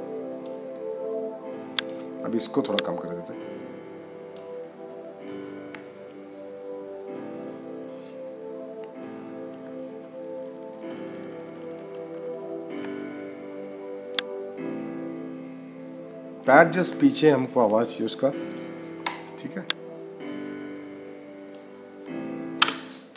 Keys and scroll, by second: 22.5 -.